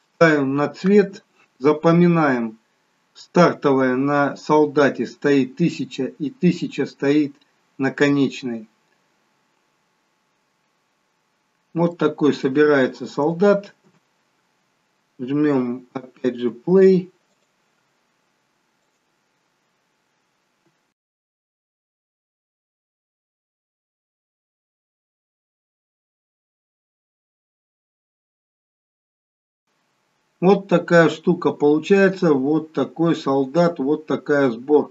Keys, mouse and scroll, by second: 19.0 click, 22.1 click, 23.6 click, 24.1 scroll down 2, 24.5 click, 25.3 scroll up 2, 28.2 scroll up 1, 29.3 click, 29.5 scroll up 1, 29.6 middle click.